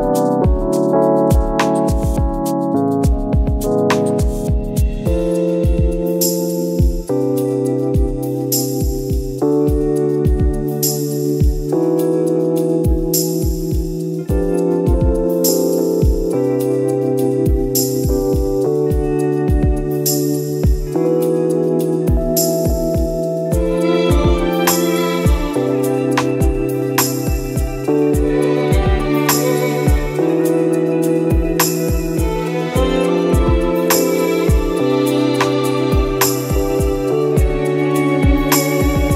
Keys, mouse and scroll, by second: 0.2 Tab, 0.6-1.0 scroll down 1, 1.2 u, 1.4 Tab, 1.6 scroll up 1, 2.8-3.2 scroll up 1, 5.7 click, 7.8 scroll down 1, 8.0-8.4 scroll up 1, 9.0 click, 9.8 ctrl+z, 10.6 click, 12.0 scroll up 1, 12.6 click, 13.3 scroll down 1, 13.5 scroll up 1, 13.7-14.1 scroll down 1, 14.1 click, 16.2 scroll up 1, 16.6 shift+click, 17.4 scroll down 1, 17.6 `, 18.1-18.7 scroll up 1, 19.0 click, 21.4-22.2 scroll down 1, 24.5 click, 29.8 scroll up 1, 30.8 click, 32.3 click, 35.0 scroll down 1, 35.6 click, 37.1-37.4 scroll down 1.